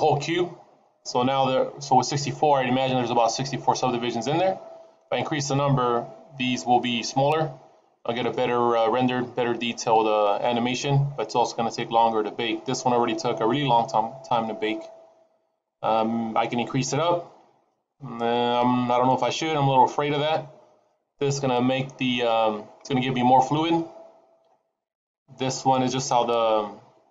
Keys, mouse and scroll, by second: 6.1-6.5 scroll up 3, 10.3-11.6 scroll down 10, 11.6-12.0 scroll down 4, 25.6 click.